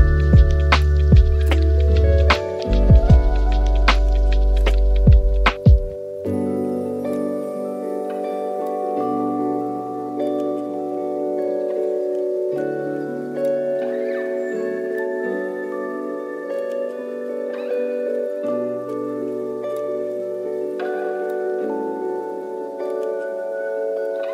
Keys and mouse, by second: 0.7 shift+middle click, 1.3 r, 3.7 g, 5.8 r, 7.1 middle click, 7.4 a, 7.5 a, 8.0-8.9 middle drag, 9.5 middle click, 9.7 shift+middle drag, 11.2-12.6 middle drag, 13.5-14.0 middle drag, 16.0-16.7 drag, 19.2 click, 20.5 s, 21.9 g, 23.2 shift+d.